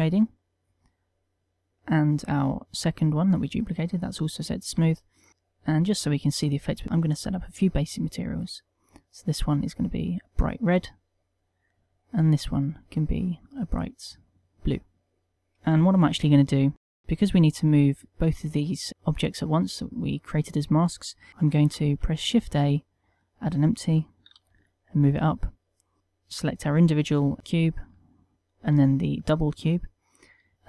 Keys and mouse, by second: 0.2 middle click, 1.4 click, 1.7 click, 2.4 click, 4.4 click, 5.2 t, 5.3 middle click, 5.5 a, 6.2 click, 7.7 click, 9.0 click, 10.0 click, 11.9 click, 12.6 click, 13.5 click, 21.3 shift+a, 22.3 shift+a, 24.7 g, 25.6 click, 26.0 click, 26.2 click, 27.4 shift+middle click, 28.7 shift+click.